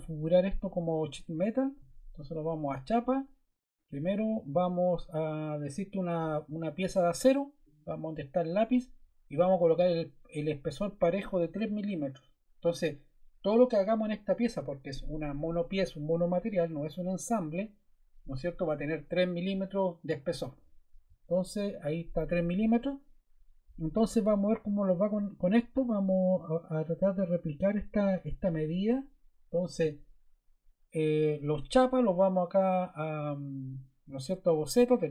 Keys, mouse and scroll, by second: 11.6 3.